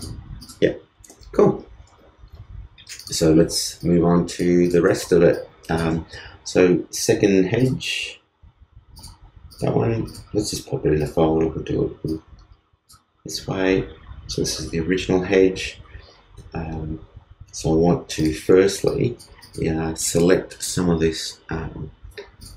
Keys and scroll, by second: 1.5 super+s.